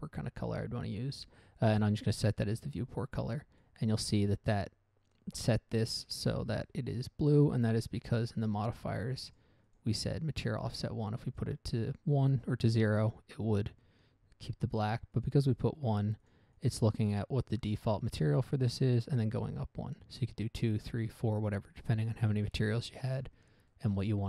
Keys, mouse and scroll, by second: 3.1-3.7 scroll down 1, 3.7 middle click, 3.7 scroll down 1, 4.0 middle click, 4.3 scroll up 1, 8.7 click, 9.6 click, 10.0 click, 11.6 click, 15.5 click, 16.6 click, 16.9 click, 18.4 click, 22.2 scroll down 1, 22.6 middle click, 23.1 middle click, 23.2 shift+middle click, 23.6-23.9 scroll down 1.